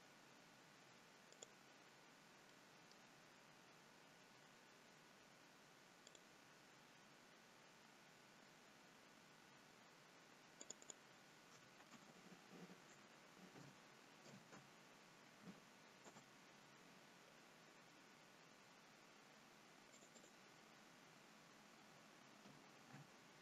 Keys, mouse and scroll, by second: 1.9-3.4 scroll down 2, 2.4 middle click, 3.4 scroll down 1, 3.7-5.1 scroll up 4, 6.0 click, 8.2-9.1 scroll down 1, 9.1-10.6 scroll down 1, 10.6 click, 10.8 click, 19.9 click, 20.2 click.